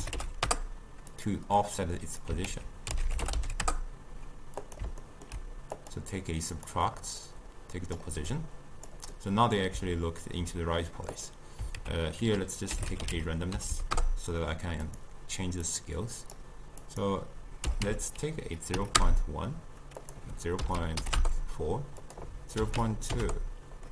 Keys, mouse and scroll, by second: 1.7 click, 2.5 ctrl+a, 5.1-5.8 ctrl+middle drag, 5.8-8.5 drag, 9.2-11.2 middle drag, 11.2 click, 11.8 ctrl+a, 13.7 Down, 15.7-20.0 drag, 20.1-23.9 drag.